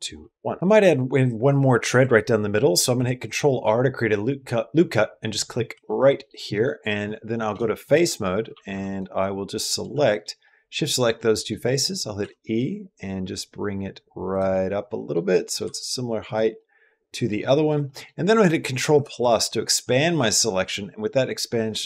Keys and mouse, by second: 0.6 ctrl+z, 2.8 ctrl+r, 5.9 middle click, 6.4 middle click, 7.3-8.5 typing, 8.7 click, 9.8 shift+click, 10.3 middle click, 11.1 middle click, 11.6 middle click, 12.1 e, 14.4 middle click, 15.3 middle click, 15.4-17.3 typing, 16.5 middle click, 17.4 middle click, 17.6 middle click, 18.6-19.3 typing.